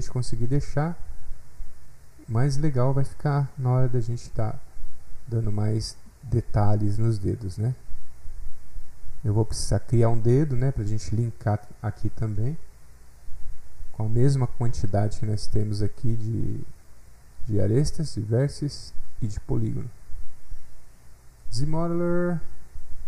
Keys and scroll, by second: 17.1 F8, 17.4 alt+Tab.